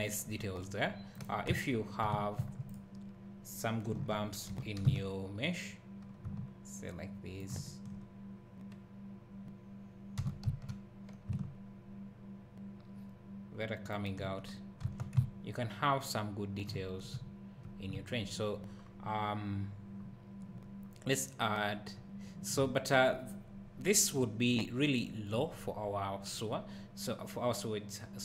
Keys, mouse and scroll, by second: 1.1 click, 1.5 Tab, 2.4 1, 2.7 click, 4.0 o, 4.5 g, 7.5 shift+click, 10.2 g, 14.0 shift+click, 14.9 Tab, 15.2 `, 18.8-20.1 scroll up 1, 22.6 `.